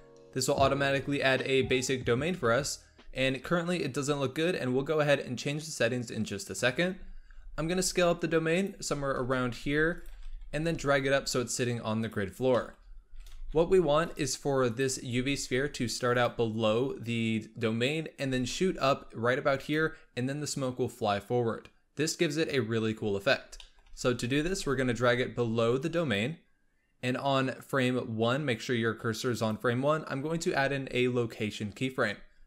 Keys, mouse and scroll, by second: 2.1 KP_1, 3.7-4.5 scroll down 3, 4.5-5.0 scroll up 4, 6.8-7.2 scroll down 2, 7.2 s, 8.8 s, 10.0 s, 12.2 scroll down 1, 12.5 shift+middle drag, 12.7 scroll up 1, 13.0 s, 14.6 click, 14.9 s, 23.1-23.5 scroll up 1, 23.5-24.1 shift+middle drag, 24.1 s, 29.2-32.3 drag.